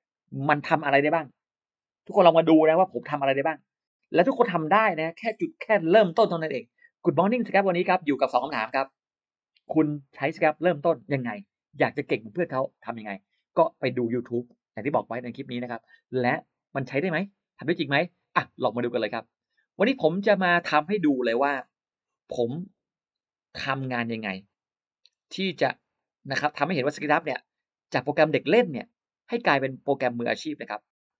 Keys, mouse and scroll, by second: 19.0 click, 20.2 click, 20.9-21.2 scroll down 2, 21.2 middle click, 22.6 click, 23.6 click, 25.8 click, 26.6 click, 29.6 click.